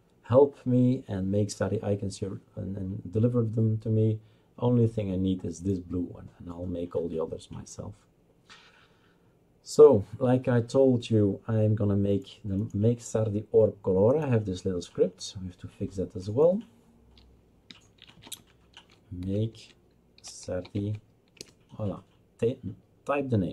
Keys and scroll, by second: 17.9-21.4 typing.